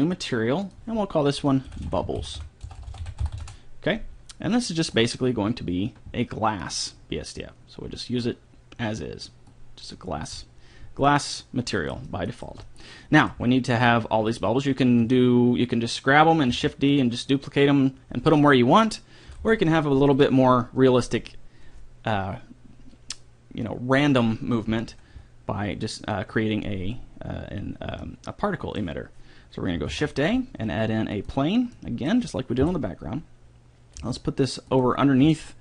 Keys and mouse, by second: 3.2 b, 5.4-7.2 drag, 10.0-12.1 middle drag, 17.0 s, 19.8 d, 30.3 s, 33.0 n, 34.4 g.